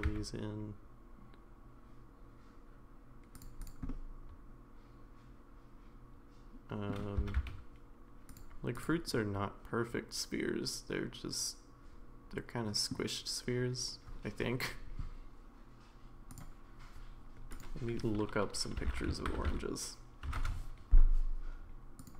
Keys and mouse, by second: 3.6 click, 3.9-6.9 middle drag, 7.2 s, 9.2-12.9 middle drag.